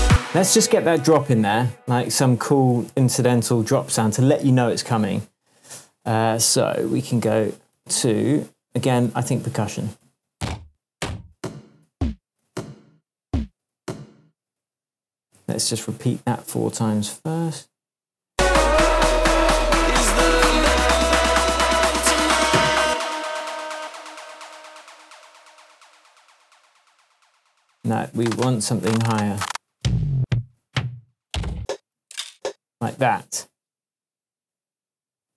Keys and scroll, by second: 0.0 space, 2.9 super+t, 7.1 Up, 7.2 Right, 7.7 Left, 9.1 Up, 9.3 Down, 10.0 Right, 10.2 Down, 12.4 Up, 13.7 Up, 22.8 space, 28.7 Down, 31.5 Up, 32.3 Down.